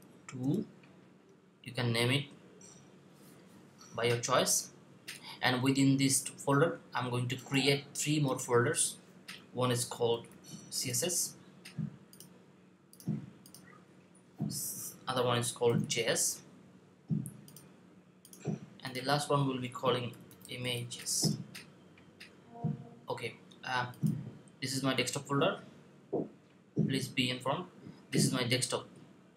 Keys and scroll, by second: 9.7-10.1 typing, 15.5 typing, 19.9-20.8 typing.